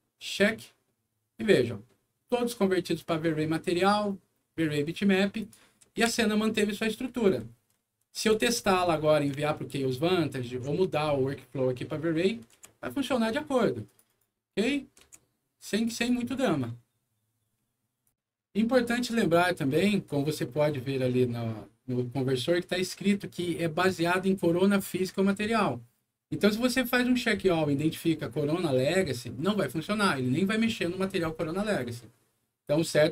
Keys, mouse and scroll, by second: 0.4 click, 5.3 click, 5.8 middle click, 6.0 F4, 6.4 scroll down 1, 7.1-9.0 scroll down 12, 9.4-10.4 alt+middle drag, 10.9 scroll up 1, 12.1 alt+middle click, 12.5 c, 13.8 click, 14.0 click, 14.4 click, 15.6 click, 15.9 click, 18.0 click.